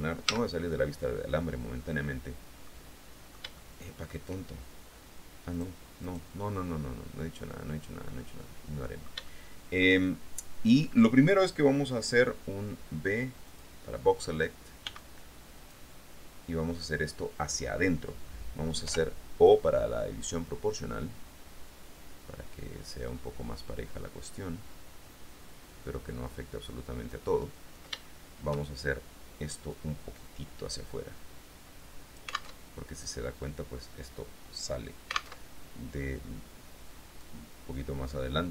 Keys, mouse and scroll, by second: 0.4 z, 2.8-4.4 middle drag, 5.7 middle click, 6.3 middle click, 6.8-10.2 middle drag, 13.6 click, 15.0 b, 15.2 click, 19.0 o, 20.6-22.6 drag, 23.2-23.9 scroll down 2, 23.9-24.5 scroll down 1, 28.2 shift+middle click, 29.9-33.1 drag, 32.7 alt+Tab, 35.6 alt+Tab, 37.4-38.4 drag.